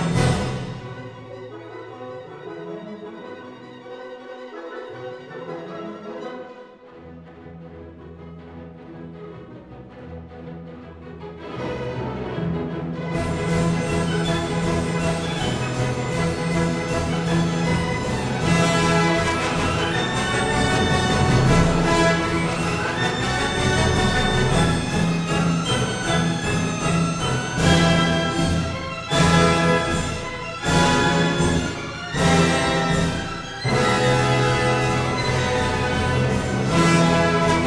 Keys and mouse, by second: 0.5 g, 3.0 click, 6.3 KP_3, 7.1 g, 7.2 z, 8.8 click, 8.9 KP_1, 9.6 g, 10.5 x, 11.7 click, 12.4 KP_3, 13.0 g, 13.4 y, 14.9 click, 16.6 KP_3, 19.4 alt+z, 19.6 Tab, 21.0 3, 22.3 KP_3, 23.1-24.3 drag, 24.8 g, 24.8 z, 26.7 click, 28.3-29.7 drag, 30.4 1, 31.0-31.4 drag, 32.2 g, 32.3 z, 33.2 click, 34.2 click, 34.9 g, 35.1 z, 36.1 click, 36.6 click, 37.1 g, 37.3 z.